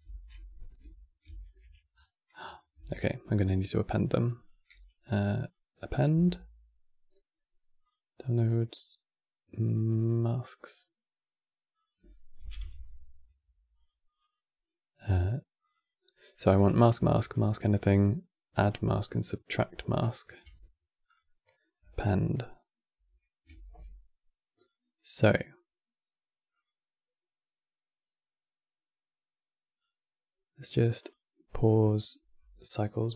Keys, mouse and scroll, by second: 1.0 ctrl+v, 1.7-2.1 scroll down 5, 2.1 click, 2.5 x, 3.1-4.1 middle drag, 4.1 click, 4.4 q, 23.2 shift+a.